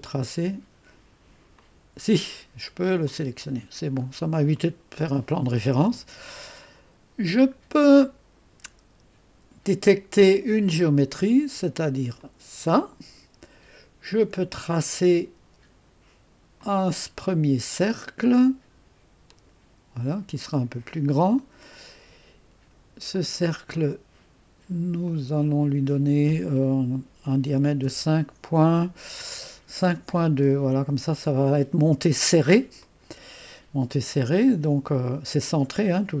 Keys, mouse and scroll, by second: 0.0 click, 1.5 click, 3.0 click, 4.0-4.6 scroll up 2, 4.6-6.6 right drag, 10.7 click, 12.2 click, 16.6 click, 17.4 click, 19.3 click, 20.9 click, 23.1 click, 25.0 click, 27.7-28.4 typing, 30.1 typing, 30.6 Return, 33.3 click, 33.4 right click, 33.4 typing.